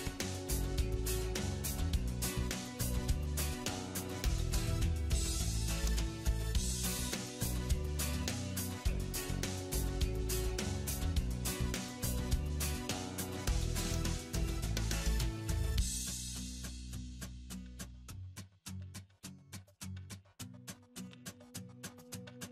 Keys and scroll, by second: 8.3 alt+w.